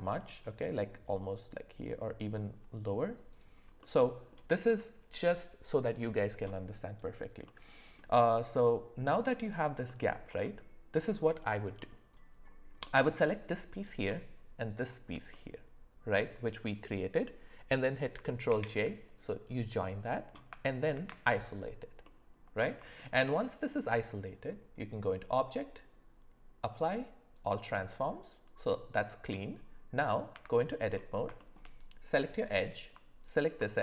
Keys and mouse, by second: 3.8-4.3 middle drag, 6.9 click, 7.4 middle click, 9.9 middle drag, 12.8-13.8 middle drag, 15.3-16.6 middle drag, 18.5 ctrl+j, 20.9 shift+h, 22.0-22.7 middle drag, 23.0 shift+middle drag, 23.4 middle click, 25.0-27.5 drag, 29.3 middle click, 30.3 Tab, 31.4 shift+middle click, 32.4 click, 33.2 click.